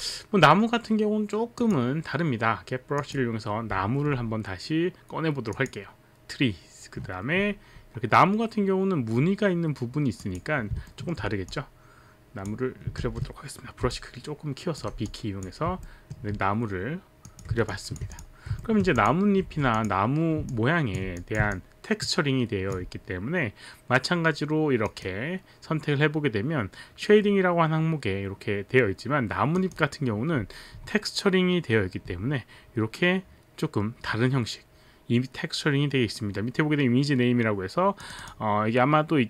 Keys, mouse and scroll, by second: 1.5 click, 3.0 click, 5.5 click, 10.2 click, 10.9 alt+middle click, 11.5 click, 13.0 ctrl+z, 13.8 b, 13.9 click, 15.1 click, 15.9 alt+middle click, 17.3 click, 17.7 alt+click, 18.3 click, 18.7 alt+middle click, 18.9 click, 19.3 alt+middle click, 19.4 w, 19.7 click, 21.1 click, 21.6 alt+click, 24.8 click, 29.6 click, 38.0 click, 38.2 click, 38.9 click.